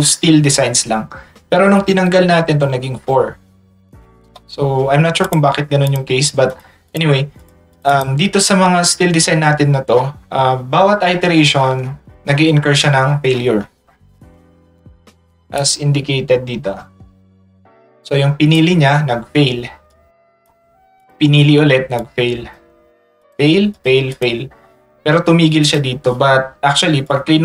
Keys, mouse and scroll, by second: 1.8 click, 2.6 click, 3.0 click, 5.2 click, 6.5 click, 6.9 click, 7.4 click, 7.7 click, 8.0 click, 9.0 middle click, 9.2 middle click, 9.9 middle click, 10.3 middle click, 10.9 middle click, 15.5 middle click, 15.6-18.6 drag, 19.9 click, 21.0 click, 22.0 click, 23.2 click, 23.7 click, 24.1 click, 24.7 middle click, 25.6 click.